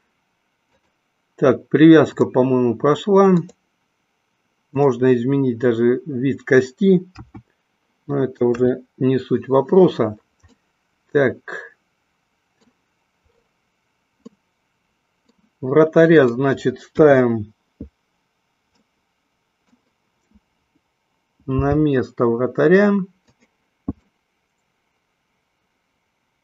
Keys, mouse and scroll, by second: 0.6-2.3 drag, 3.4 click, 7.1 q, 8.5 KP_1, 10.5-12.6 middle drag, 14.3-15.3 middle drag, 16.1 click, 16.9 KP_1, 18.8-19.9 middle drag, 21.5 g, 23.4 click, 24.0-26.4 middle drag.